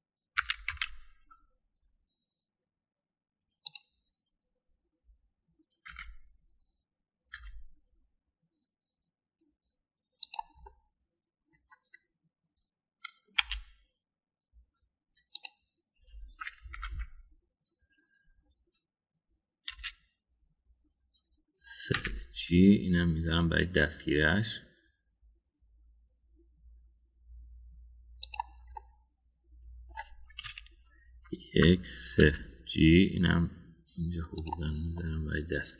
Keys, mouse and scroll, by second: 1.4 s, 6.9 s, 11.6 middle click, 14.4 e, 17.7 ctrl+l, 20.7 KP_3, 22.9 g, 29.7-30.9 middle drag, 31.4 KP_1, 33.2 g.